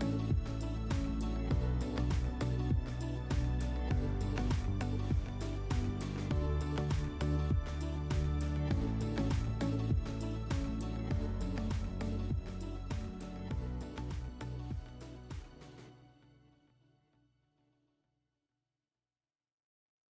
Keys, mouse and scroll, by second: 3.1 alt+middle click, 3.7 click.